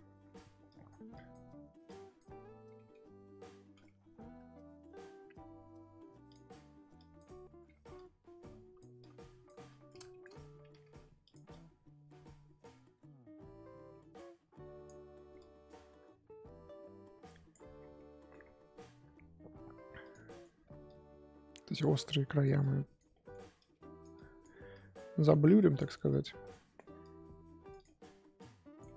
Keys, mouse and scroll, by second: 0.2-0.7 scroll down 2, 0.7-2.7 drag, 2.7-6.5 middle drag, 6.9 click, 7.8 ctrl+z, 7.9-10.1 drag, 10.1 shift+middle click, 10.3-10.7 scroll up 2, 10.7 f, 11.5-17.7 drag, 17.7 scroll down 4, 17.9 middle click, 18.4-20.1 scroll up 2, 20.1 click, 20.2 middle click, 20.5-20.8 scroll up 2, 20.8-23.1 drag, 23.1 middle click, 23.6-25.1 drag, 25.1 middle click, 25.4 click, 25.9 middle click, 26.2 click, 26.5 middle click, 27.0 click, 27.8 middle click, 28.4 click, 28.8 middle click.